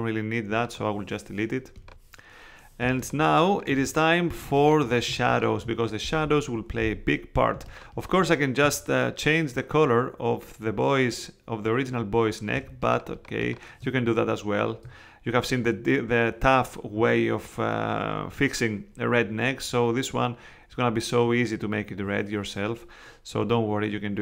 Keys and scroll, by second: 2.8 space, 12.5 space.